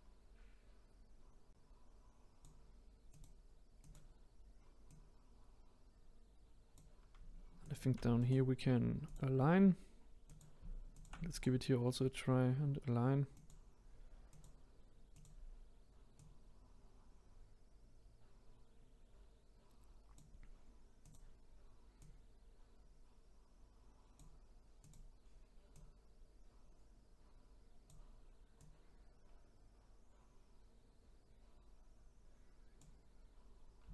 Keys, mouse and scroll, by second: 3.0 click, 3.8 click, 4.9 click, 7.6 shift+click, 8.2-10.2 right drag, 10.2 click, 10.9 shift+click, 11.3-14.3 right drag, 14.3 click, 15.1 click, 16.1 click, 21.0 click, 22.0 click, 24.8 click, 25.7 click, 28.5 click.